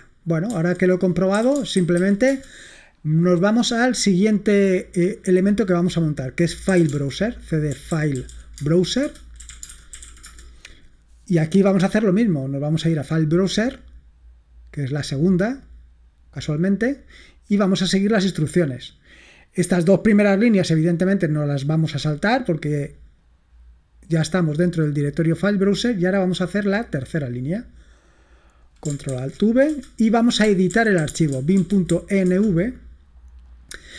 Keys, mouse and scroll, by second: 0.6 ctrl+c, 1.1-2.5 typing, 6.5-11.7 typing, 9.0 Return, 12.7 click, 12.9 middle click, 18.8 scroll up 2, 19.6-19.9 scroll down 2, 20.9 click, 23.1 click, 24.5 click, 26.3 click, 26.9 right click, 27.8-29.2 drag, 29.2 ctrl+alt+v, 29.8 Return, 30.2-32.4 typing.